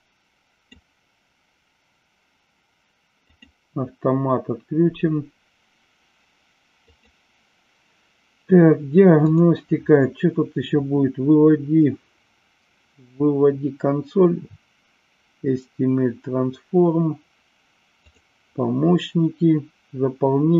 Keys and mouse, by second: 3.2 click, 6.8 click, 9.2 click, 17.9 click.